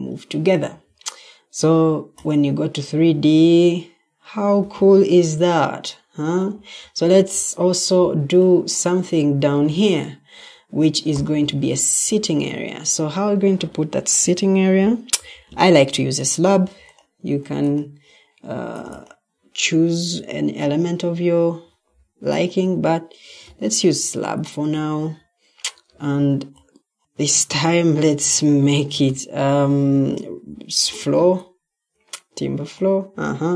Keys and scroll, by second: 0.6 Escape, 11.8 Escape, 23.3 t, 23.8 t, 26.9 t, 27.0 Escape, 29.0-32.6 typing.